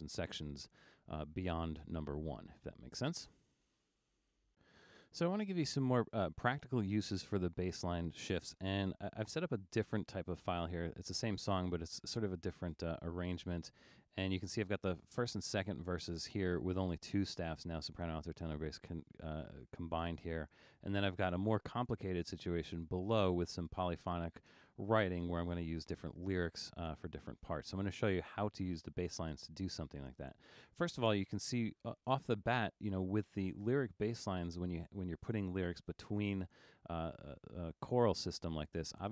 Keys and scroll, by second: 9.5 super+=.